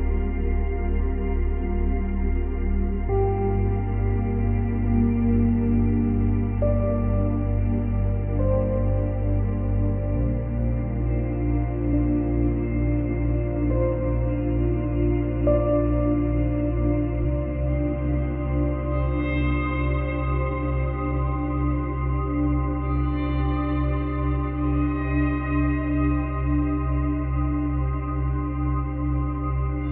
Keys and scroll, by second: 9.2 space, 11.1 space, 13.1 ctrl+z, 17.3 space, 19.2 space.